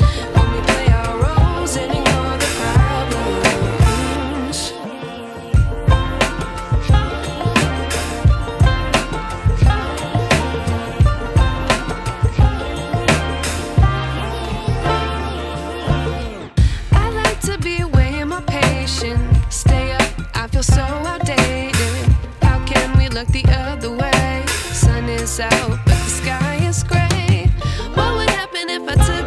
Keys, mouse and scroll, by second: 4.1 ctrl+t, 4.9 click, 4.9-5.8 drag, 7.3-7.6 click, 10.8-12.6 alt+shift+drag, 14.8 space, 15.0-16.3 ctrl+drag, 17.3-19.0 scroll down 1, 24.1 click, 26.0 click, 26.4-27.0 alt+click, 27.5 ctrl+t, 28.6 click, 28.6-29.2 alt+shift+drag.